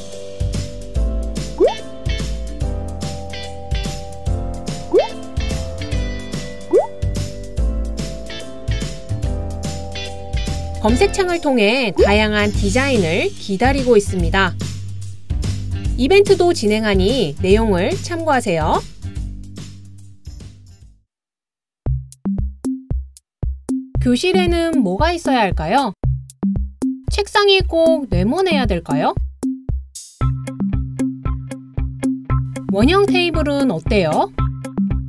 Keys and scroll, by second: 2.3-5.6 typing, 10.4-16.6 typing, 19.8-21.2 typing, 26.4 super+c, 26.4 super+v, 27.4 super+c, 29.4 d.